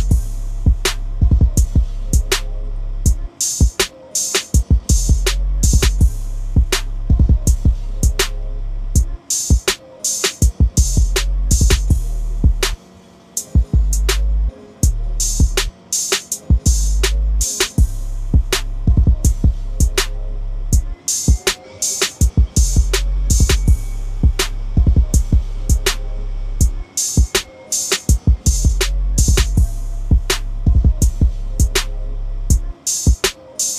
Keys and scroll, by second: 0.6 ctrl+v, 13.5 ctrl+a, 14.4 ctrl+c, 15.6 ctrl+v, 28.0 ctrl+d, 30.4 ctrl+=.